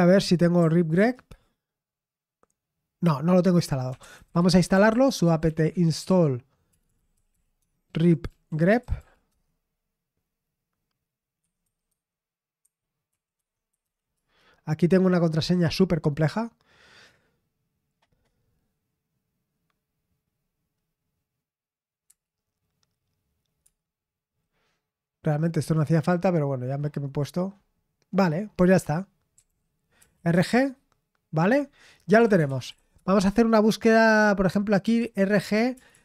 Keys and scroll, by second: 0.6-1.0 typing, 3.6-9.5 typing, 11.2-14.3 typing, 16.8 typing, 22.1 Return, 23.6 typing, 29.1-30.2 typing, 30.3 Return, 31.8-33.2 typing, 34.6-36.0 typing.